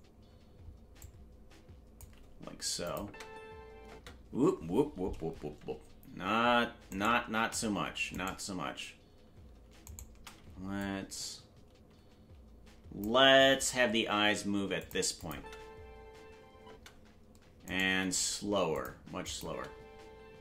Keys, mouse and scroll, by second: 0.9-2.0 drag, 2.8 click, 3.0 space, 5.0 space, 7.1 shift+right click, 8.1-8.9 right drag, 9.9-10.8 shift+right drag, 10.8-13.0 drag, 13.5 g, 15.2 click, 15.3 space, 17.6 right click, 17.6 space, 17.8 g, 19.2 click, 19.4 space.